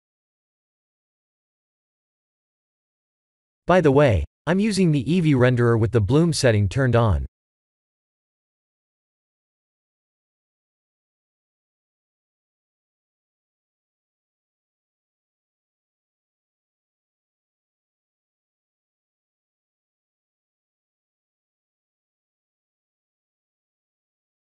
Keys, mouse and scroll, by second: 2.7 ctrl+space, 4.6 click, 7.0 click, 12.4 click, 13.7 click, 14.0 scroll up 4, 14.5 shift+middle click, 17.3 click, 17.9 click, 20.2 click, 21.8 middle click.